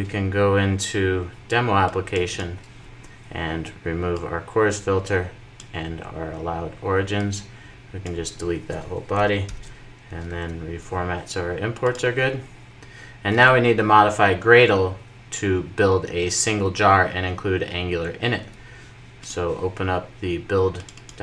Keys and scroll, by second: 9.3 alt+super+l, 10.5 super+s.